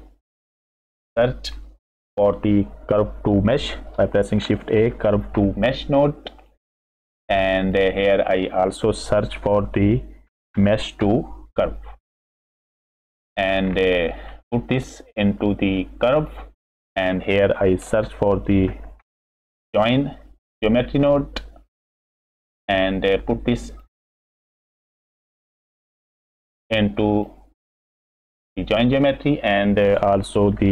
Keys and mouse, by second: 0.5 click, 1.7 click, 2.1 click, 4.4 shift+a, 8.2 middle click, 9.3 shift+a, 14.1 middle click, 15.4-16.3 drag, 16.8 middle click, 17.2 click, 18.0 shift+a, 23.2 click, 23.4 click, 24.6-25.0 drag, 25.6 click, 26.6 drag, 27.9-28.6 drag, 29.3 middle click, 29.7 click, 30.6 shift+a.